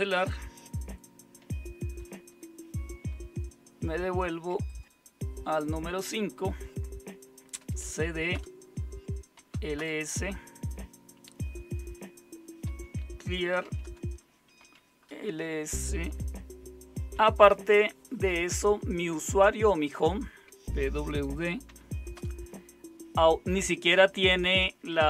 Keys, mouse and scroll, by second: 1.9 super+w, 7.3-9.9 typing, 8.3 Return, 12.6-15.1 typing, 20.5-22.1 typing.